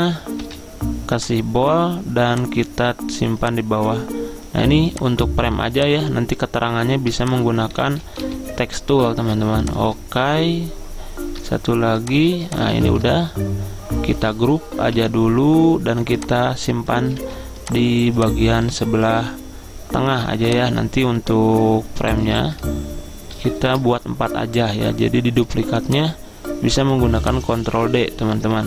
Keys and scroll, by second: 0.5 ctrl+a, 8.0-9.4 typing, 12.9 ctrl+z, 14.9 ctrl+g, 17.3 ctrl+z, 23.4 ctrl+d, 23.7 ctrl+d.